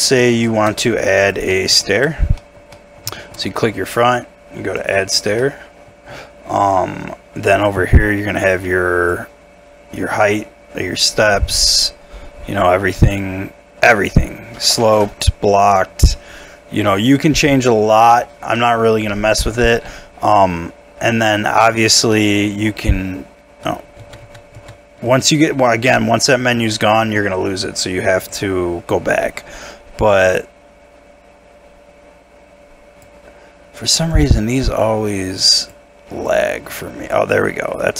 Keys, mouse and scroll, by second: 0.4 shift+middle click, 0.7 shift+scroll up 2, 1.5 middle click, 1.8 shift+middle click, 2.1 shift+scroll up 1, 2.4 middle click, 3.4 shift+middle click, 18.2-18.5 scroll down 1, 18.5 middle click, 20.5 Tab, 21.0 Tab, 21.3 middle click, 21.8-22.1 scroll up 1, 22.1 middle click, 22.7 Tab, 24.0 ctrl+z, 24.2 ctrl+z, 24.5 ctrl+z, 25.1 ctrl+z, 26.7 ctrl+z.